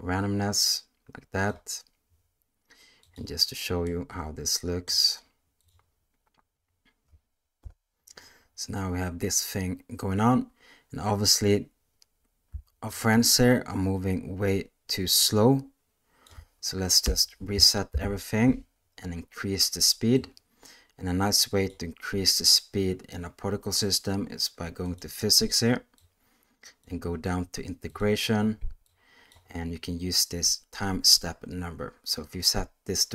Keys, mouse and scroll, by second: 3.0 click, 3.8-4.8 middle drag, 5.5 click, 7.5 KP_0, 12.9-16.2 shift+drag, 17.0 space, 17.8 shift+Left, 20.1-21.6 drag, 24.8 click, 25.9 click, 27.9 click, 28.9 click.